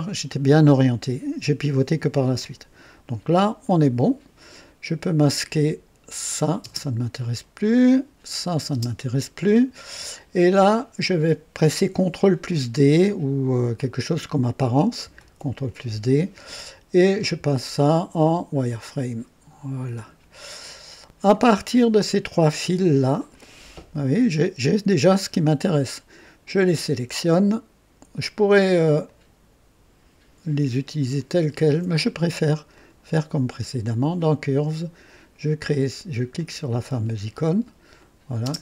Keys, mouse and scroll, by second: 3.6-4.5 drag, 5.3 click, 6.3 click, 6.6 space, 7.2 click, 8.4 click, 8.7 space, 9.4 click, 10.3 click, 15.2 ctrl+d, 17.0 click, 18.2 click, 19.9 click, 20.6 click, 21.7 right click, 22.6-23.5 drag, 26.4 click, 29.0 ctrl+click, 31.2 ctrl+click, 34.1 click, 36.3 click, 38.0 click, 38.4 space.